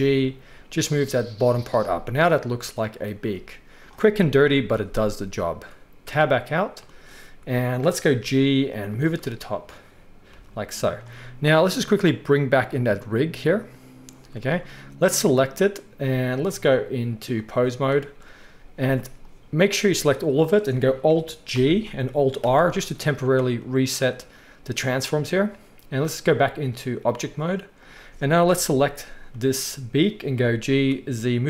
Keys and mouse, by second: 0.0-2.0 middle drag, 0.0 g, 2.5-3.0 middle drag, 3.5-6.0 middle drag, 4.3 KP_3, 6.0 Tab, 7.5 shift+middle drag, 7.9 middle drag, 8.2 g, 10.2 g, 12.6 click, 13.4 click, 14.3-16.6 shift+middle drag, 16.6-27.9 drag, 18.5 z, 21.5 alt+g, 22.4 alt+r, 27.9-31.4 middle drag, 28.5 KP_1, 30.3 g.